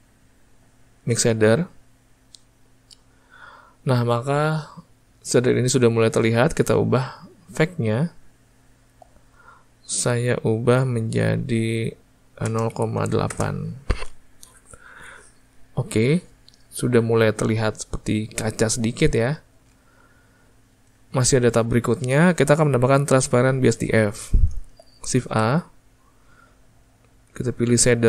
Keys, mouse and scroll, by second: 2.1-11.2 drag, 12.8-19.9 drag, 19.9-28.0 ctrl+middle drag.